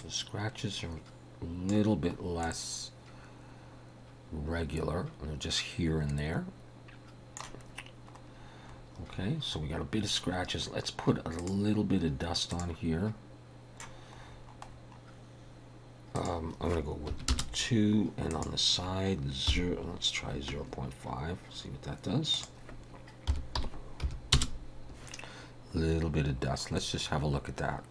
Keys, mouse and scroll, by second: 0.0 click, 2.5 middle click, 8.2-10.1 scroll up 17, 11.4 click, 12.5 click, 14.2-14.9 scroll down 9, 16.2 click, 18.3 click, 22.3 click, 25.8 scroll up 2, 26.4-27.0 scroll down 6.